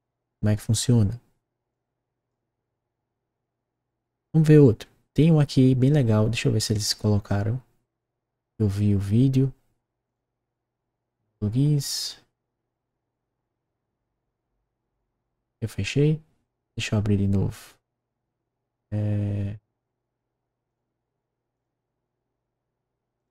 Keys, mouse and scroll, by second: 1.6 click, 10.0 click, 20.6 click, 21.5 click, 23.1 click.